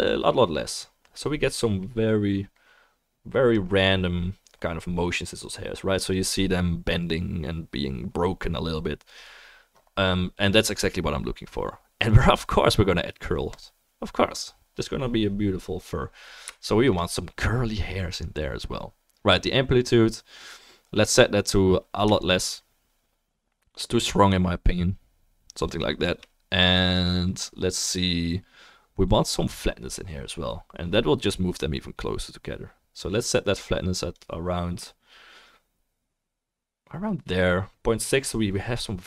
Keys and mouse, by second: 4.1 middle click, 4.1 right click.